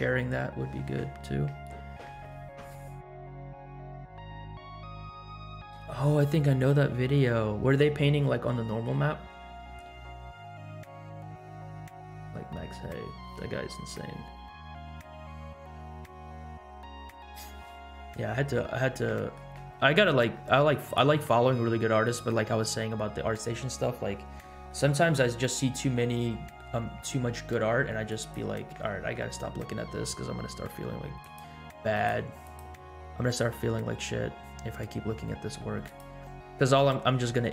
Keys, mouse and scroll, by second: 19.0 middle click, 20.0 r, 21.1 g, 24.5 middle drag, 24.9 scroll down 2, 25.6-25.9 scroll down 2, 28.0-28.6 drag, 28.9 middle drag, 31.2 click, 31.9 click, 32.4 click, 32.8-33.3 scroll up 4, 33.7-34.6 scroll down 6, 35.8-36.2 drag.